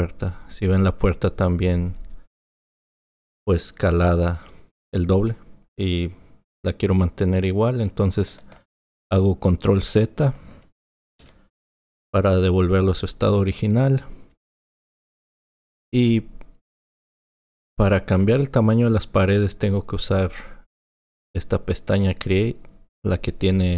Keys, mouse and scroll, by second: 11.2 ctrl+z, 23.0 click.